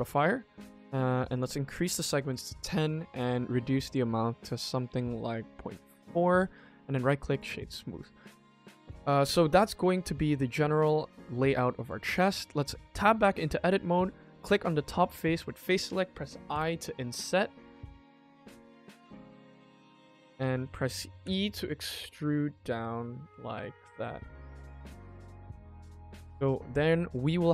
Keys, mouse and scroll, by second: 1.2 click, 3.3 click, 4.3 click, 4.4 click, 4.6 click, 4.8 click, 5.4 click, 5.9 middle click, 6.4-7.2 right drag, 7.2 click, 7.5 middle click, 7.9 click, 8.2-10.3 middle drag, 10.4 middle click, 11.3 ctrl+s, 11.6 middle click, 12.0 Tab, 12.5 click, 13.5 click, 14.4 click, 20.1 middle click, 21.1 e, 23.4 middle click, 24.3 g, 25.6 middle click, 26.1 Tab, 26.4 click, 26.8 middle click.